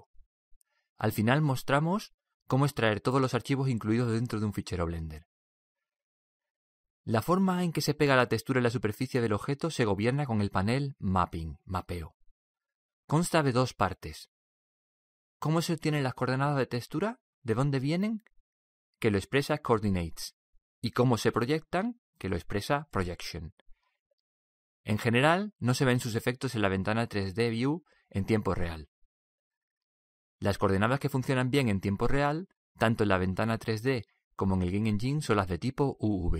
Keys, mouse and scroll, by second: 11.3-15.0 drag, 17.7-19.7 drag, 23.2-30.6 drag.